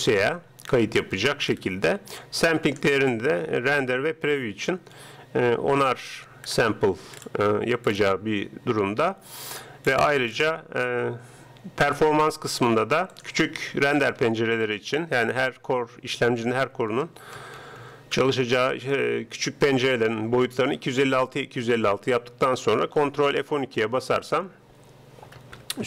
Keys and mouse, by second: 2.7-4.4 drag, 6.5-9.5 middle drag, 9.5-11.3 drag, 13.1-15.0 drag, 23.6 ctrl+F12.